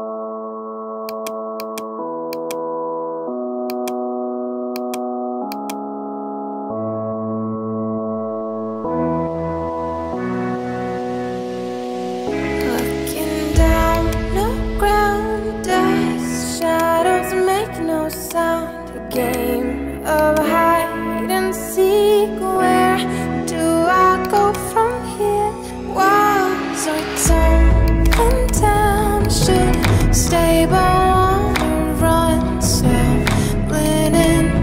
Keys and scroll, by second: 0.4 [, 10.2 ], 25.2 5, 25.9 Return.